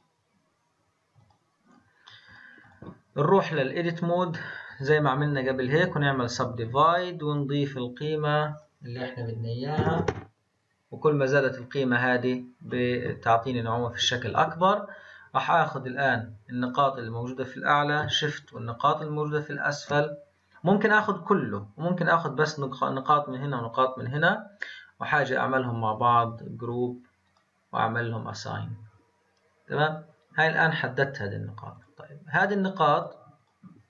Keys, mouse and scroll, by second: 1.2 click, 2.3-2.7 drag, 3.4-4.7 drag, 4.7-7.3 right drag, 7.3-10.9 drag, 14.2 click, 15.1-15.9 scroll up 2, 15.9-18.6 drag, 25.1 click, 26.1-31.3 drag, 31.7-33.0 drag, 33.3 click.